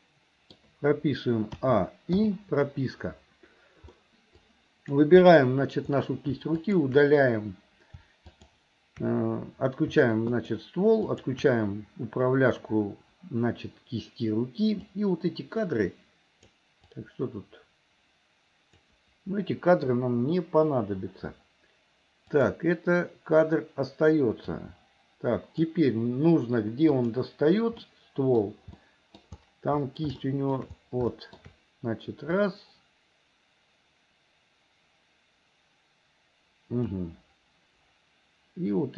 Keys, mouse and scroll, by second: 1.6 a, 2.3 i, 4.0 middle click, 4.4 click, 6.6 shift+click, 8.4 shift+click, 10.3 shift+click, 11.1 shift+click, 15.0-16.5 drag, 17.0-18.9 drag, 20.0 Delete, 22.4 click, 24.5-25.6 drag, 27.1 click, 27.9 middle click, 28.8 middle click, 30.2 shift+middle click, 31.1 shift+middle click, 32.4-37.0 drag.